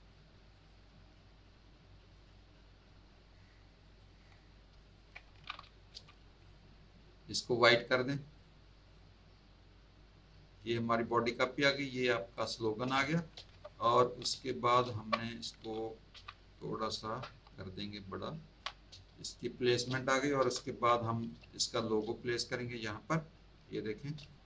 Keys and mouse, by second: 0.5 click, 3.8 click, 4.8 ctrl+click, 6.3 click, 7.8 click, 8.9 click, 12.3 click, 12.9 space, 13.0 click, 13.3 z, 13.6 alt+click, 13.8 alt+click, 14.4 space, 14.4 click, 14.8 z, 14.9 click, 16.5 click, 16.9 shift+click, 17.7 shift+click, 18.9 space, 19.0 click, 21.2 click, 21.4 space, 21.5 click, 22.3 click, 24.1 space, 24.2 click.